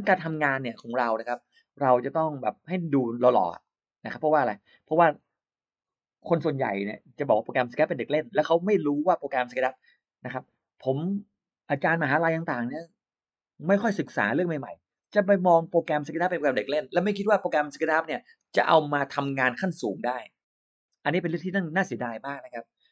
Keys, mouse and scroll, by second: 3.5 click, 6.8 click, 8.9 click.